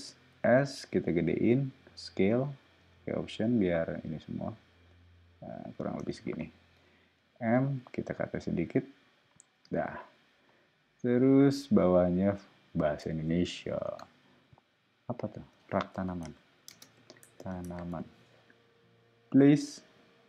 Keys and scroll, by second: 0.3 s, 6.8 m, 9.6 space, 12.9 super+a, 15.5-18.4 typing.